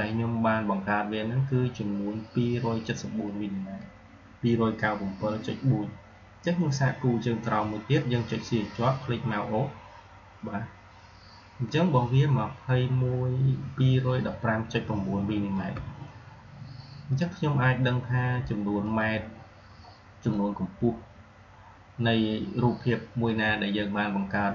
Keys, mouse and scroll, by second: 8.4 shift+Num_Lock, 8.6-10.8 shift+drag, 18.7 shift+click, 20.5-23.3 drag.